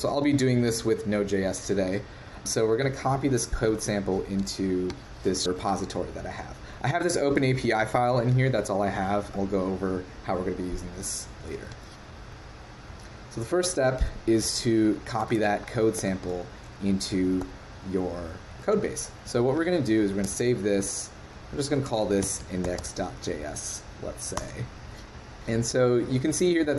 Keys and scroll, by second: 3.7 super+Tab, 11.4 super+w, 15.3 super+Tab, 16.0 super+Tab, 17.4 super+n, 18.5 super+v, 20.2 super+s.